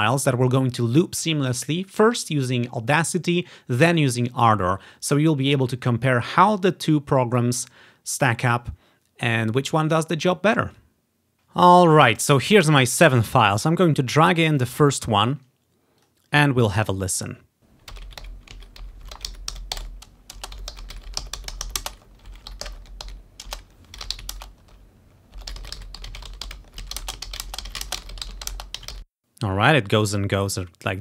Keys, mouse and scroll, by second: 13.4 click, 14.1 click, 16.1 click, 16.9 click, 17.2 click, 17.6 space, 29.2 space, 30.6 click.